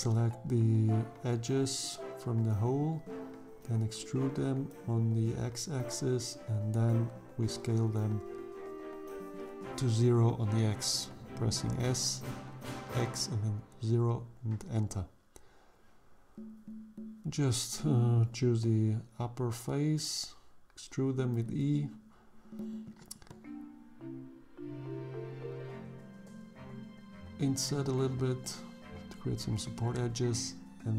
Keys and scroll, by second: 0.8 e, 2.5 x, 5.7 s, 5.9 x, 6.4 0, 7.0 Return, 14.6 3, 18.1 e, 25.5 3, 26.8 i, 28.6 i.